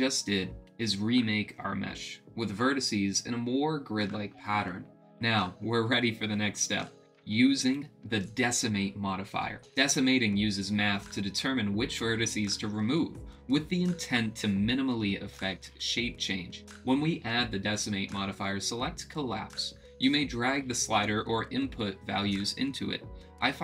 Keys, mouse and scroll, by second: 0.0-1.5 drag, 2.0 middle click, 17.7-18.9 drag, 20.3-23.2 drag.